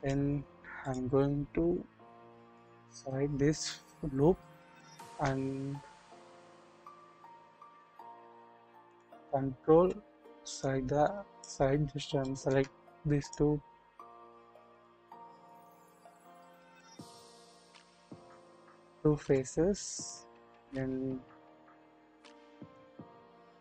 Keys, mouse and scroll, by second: 0.0 click, 2.5 alt+click, 7.8 alt+click, 8.8 ctrl+click, 10.6 click, 11.7 scroll down 2, 12.2 shift+middle click, 14.2 ctrl+z, 14.7 ctrl+click, 15.5 ctrl+click, 16.9 scroll up 1, 18.2 shift+click, 19.8-22.8 drag.